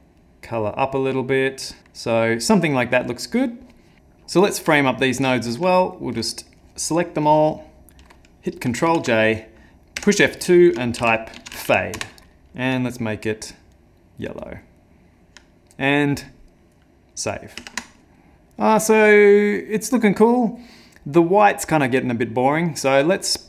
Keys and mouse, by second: 0.2 click, 1.8 click, 12.2 F2, 12.6 n, 13.8 click, 14.4 click, 17.6 ctrl+s, 18.3 click, 21.9 middle click, 22.4 middle click, 22.9 middle click.